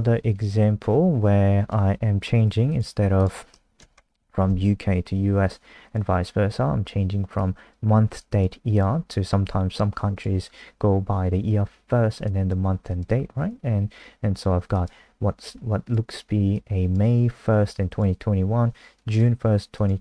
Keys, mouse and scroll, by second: 2.4 ctrl+c, 2.6 click, 3.6 Right, 3.9 ctrl+shift+End, 4.2 ctrl+v, 5.8 click, 13.3 ctrl+s, 14.7 click.